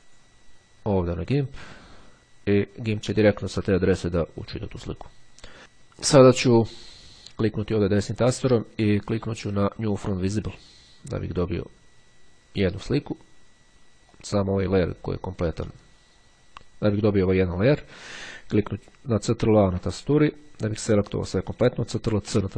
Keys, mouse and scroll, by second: 7.1-8.2 drag, 10.1 click, 14.2 click, 15.7 click, 16.9 click, 19.1 ctrl+a, 22.3 ctrl+c.